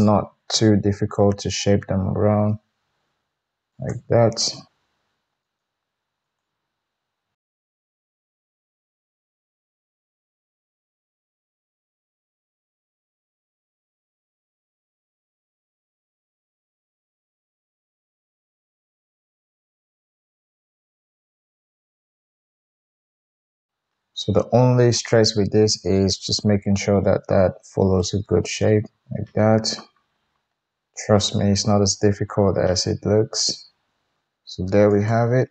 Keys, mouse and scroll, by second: 0.0-0.8 middle drag, 0.8 g, 4.7 g, 5.0 middle click, 6.2 click, 6.5 g, 7.3 shift+click, 7.5 shift+click, 7.7 g, 8.8 click, 9.0-10.2 middle drag, 9.1 g, 9.7 KP_1, 10.2-11.3 drag, 10.8 g, 11.3-11.7 middle drag, 11.7 click, 11.7 middle click, 12.0 g, 12.6-13.9 drag, 13.4 g, 13.9 middle click, 14.0 drag, 14.2 g, 14.7 ctrl+r, 15.3 ctrl+z, 15.8 middle click, 16.1 alt+click, 16.5 g, 17.7-23.0 typing, 17.8 click, 18.1 drag, 18.3-18.8 middle drag, 18.8 click, 18.9-19.3 middle drag, 19.3 click, 19.4-19.9 middle drag, 19.9 drag, 20.0-20.8 middle drag, 20.8 click, 21.7 middle click, 22.6 click, 22.6 middle click, 22.7 click, 23.6 shift+Tab, 26.3 g, 30.5 g, 30.9-33.9 middle drag, 33.9 click, 33.9 g, 33.9 middle click, 34.2 KP_1, 34.8 click, 35.0-35.5 middle drag.